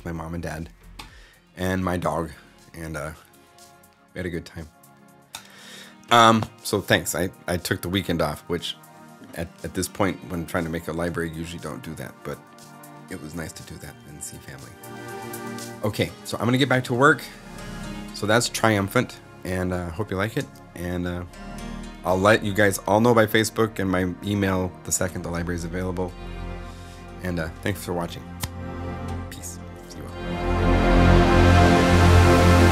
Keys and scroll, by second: 13.1 shift+super+Up, 16.2 super+Left, 20.2 0.